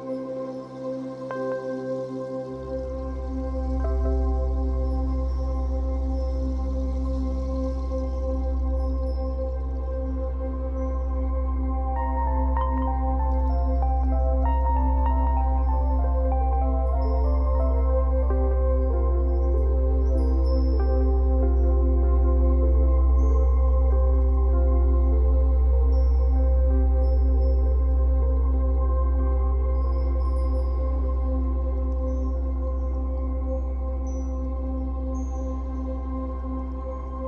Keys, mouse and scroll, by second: 0.9-2.2 middle drag, 2.2-3.6 drag, 3.3 scroll down 1, 3.6-10.4 middle drag, 6.0 scroll up 1, 6.6 scroll up 1, 9.3-10.4 scroll up 2, 10.4-11.6 drag, 11.6-12.8 middle drag, 12.8-15.0 drag, 14.7 scroll down 2, 15.0-22.5 middle drag, 17.1-17.5 scroll up 2, 20.9 scroll up 2, 22.5-24.4 drag, 24.4-26.0 middle drag, 26.0-28.2 drag, 27.8-28.2 scroll down 2, 28.2-32.7 middle drag, 29.3-29.7 scroll up 2, 30.5 scroll up 2, 32.7-33.9 drag, 33.9-37.2 middle drag.